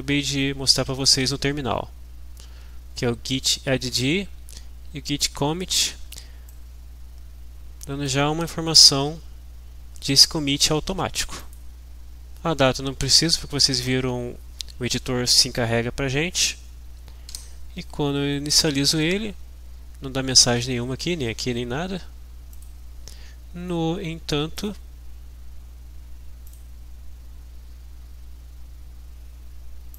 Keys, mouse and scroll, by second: 6.5-8.6 drag, 11.4-12.6 drag, 17.4 F5, 22.5 click, 24.6 click, 26.6 click.